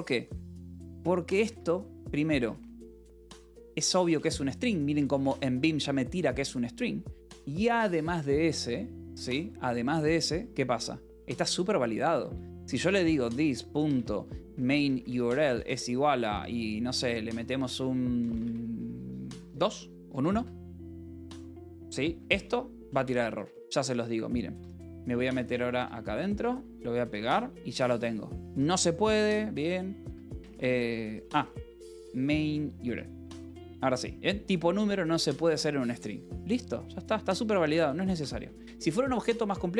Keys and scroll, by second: 0.0-5.4 typing, 3.8 Escape, 8.8 j, 9.4 k, 11.1 a, 12.1 Escape, 12.2-16.1 typing, 17.5-23.2 typing, 20.0 Escape, 21.0 Escape, 21.8 Escape, 22.9 Escape, 24.5 f, 25.7 a, 25.9 Return, 26.2 Escape, 26.5 p, 27.7 ctrl+s, 28.5 d, 29.9 Escape, 29.9-32.3 typing, 32.7 Escape, 33.5 l, 37.6 d, 38.7 ctrl+s.